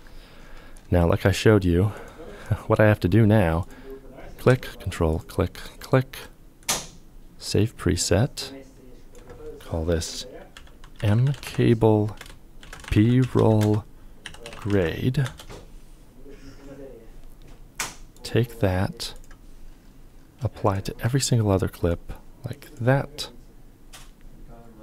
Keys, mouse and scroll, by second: 4.7 ctrl+click, 5.2 ctrl+click, 9.8-14.9 typing, 20.2 shift+click.